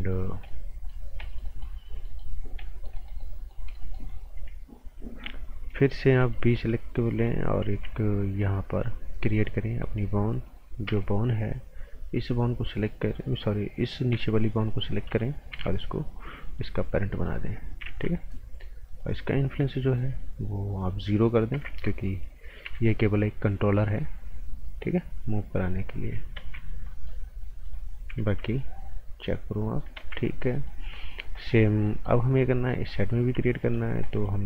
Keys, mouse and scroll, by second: 0.3 scroll up 1, 0.4 right click, 1.0 scroll down 1, 1.2 right click, 2.4 scroll up 1, 2.6 right click, 6.2 b, 7.2 click, 7.6 a, 8.8 click, 10.8 p, 14.1 b, 14.7 click, 15.5 p, 16.4 click, 16.9 scroll down 1, 17.1 right click, 17.8 z, 18.9 click, 19.9 s, 20.8 click, 21.5 KP_0, 21.6 KP_Enter, 22.6 z, 22.9 scroll down 1, 23.9 click, 26.4 ctrl+z, 26.7-27.2 scroll up 2, 26.9 right click, 27.6 click, 27.9 scroll down 1, 28.1 z, 28.6 click, 30.0 ctrl+z, 30.2 scroll down 1, 30.5 right click, 30.8-31.7 scroll up 3, 30.9 right click, 31.3 right click, 31.8 right click, 32.5 scroll down 1, 32.7 right click, 33.6 alt+right click, 34.0 right click.